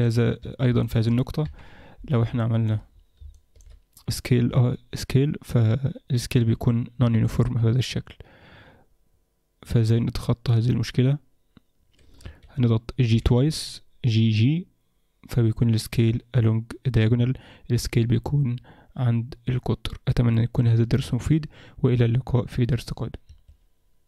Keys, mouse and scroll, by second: 0.0 click, 0.4 Tab, 0.8 middle click, 1.4 KP_7, 1.7-2.3 scroll up 3, 2.4 shift+middle click, 3.1 scroll up 1, 3.3 shift+middle click, 4.5 s, 13.1 g.